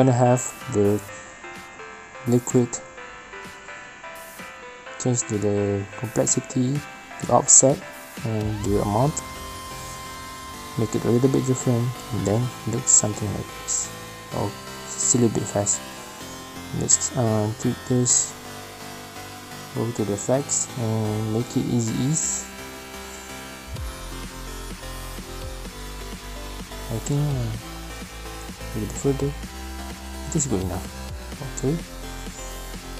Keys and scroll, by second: 10.8 space, 13.3 space, 23.3 F9, 25.2 space, 26.9 space, 29.2 space, 30.2 space.